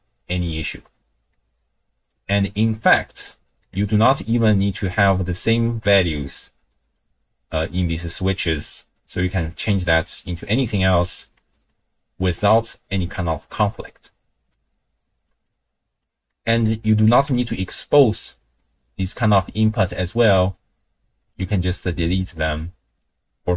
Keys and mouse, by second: 1.3-2.3 middle drag, 3.2 middle click, 9.3 click, 10.0 click, 11.4 click, 12.2 click, 14.3 n, 15.5 click, 16.3 click, 16.3 right click, 17.0 click, 17.3 n, 18.6 click, 20.2 click, 22.3 click, 22.8 click.